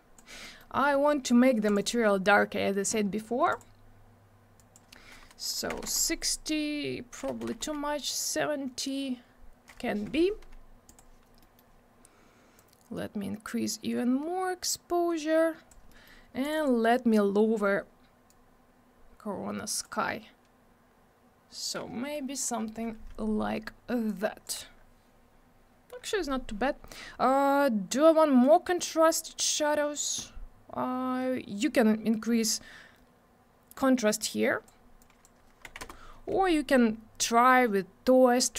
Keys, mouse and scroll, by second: 0.4 middle click, 0.7 scroll down 1, 0.9 middle click, 1.0 double middle click, 1.2-1.6 scroll up 1, 1.6 click, 1.8 click, 1.9 double click, 3.5 click, 4.5 click, 5.7 6, 5.8 Return, 7.3 7, 7.5 Return, 10.9 click, 11.4 middle click, 12.5 click, 15.9 middle click, 16.0 middle click, 16.4 click, 16.5 double click, 16.5 click, 18.3 click, 24.0 click, 32.2 click, 35.0 click, 35.6 2, 35.8 Return.